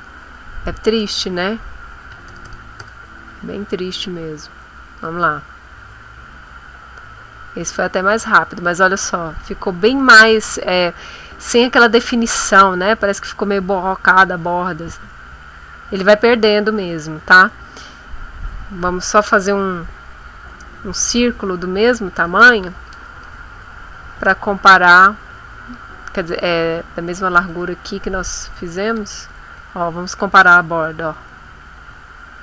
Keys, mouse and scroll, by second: 1.8-2.7 typing, 5.0 click, 6.9-8.0 scroll up 4, 8.3 scroll up 2, 9.0-9.5 scroll down 2, 12.6-13.3 scroll down 4, 13.6 scroll up 2, 14.8-15.4 scroll up 4, 16.0-16.4 scroll down 2, 16.7-17.7 scroll down 4, 17.9 scroll up 2, 24.2 click, 25.7 click, 26.6-27.6 drag, 28.2 click, 29.7 ctrl+middle click, 30.9-32.4 ctrl+middle drag.